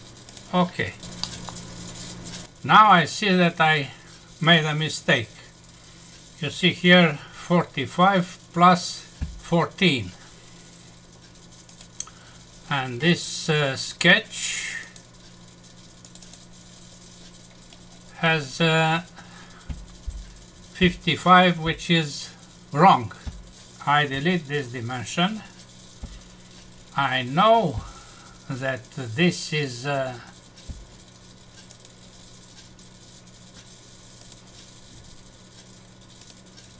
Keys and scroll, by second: 1.2 F6, 24.1 Delete.